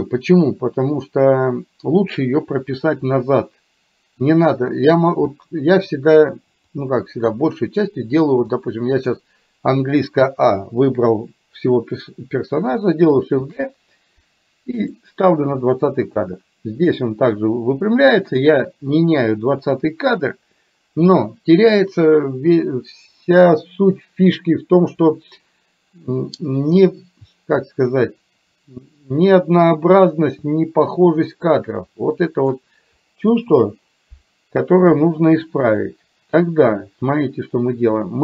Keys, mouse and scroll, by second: 6.9 click, 8.5 click, 10.4 a, 13.5 shift+d, 15.8 click, 16.1-18.5 drag, 31.9 click, 33.3 Delete.